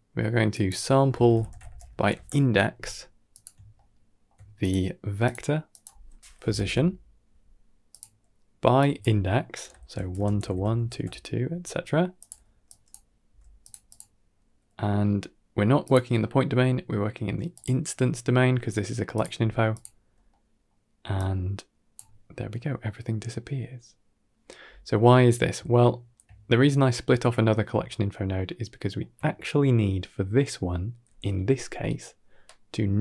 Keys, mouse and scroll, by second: 0.4-3.3 drag, 0.4 x, 3.6-4.1 ctrl+middle drag, 4.5-5.2 drag, 5.6-7.8 drag, 8.6-12.1 drag, 12.5 drag, 13.1 g, 13.7 click, 15.7-17.5 drag, 19.0 click, 19.2 g, 19.9 scroll down 2, 20.1-20.6 middle drag, 21.0-21.8 drag, 24.5-24.8 scroll down 3, 25.5-26.0 shift+middle drag, 27.7-28.9 ctrl+middle drag.